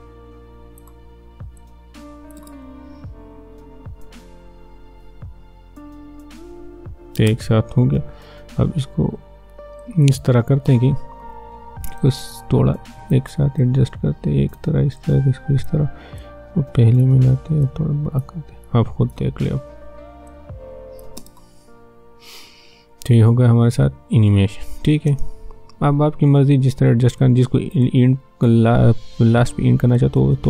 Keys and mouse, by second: 2.4 space, 7.3 space, 9.8-21.2 drag, 21.2 space, 27.2-29.9 drag, 29.9-30.4 drag.